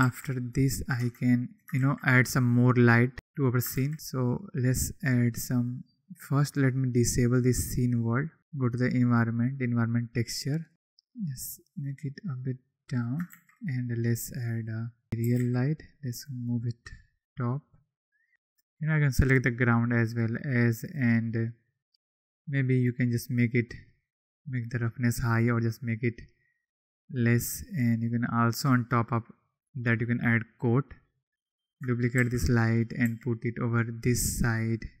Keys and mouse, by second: 0.0 ctrl+s, 1.3 Tab, 3.7 shift+a, 6.5-7.8 drag, 8.4-9.6 drag, 10.7 shift+a, 11.3-12.9 drag, 13.2 shift+a, 15.2 g, 15.3 z, 16.1 click, 19.9 click, 23.0 click, 24.1-25.3 drag, 25.3-26.8 middle drag, 27.9 middle click, 28.4-29.7 middle drag, 31.3 KP_7, 31.4 click, 32.1 shift+d, 32.7 click, 33.0 r, 34.3-35.0 drag.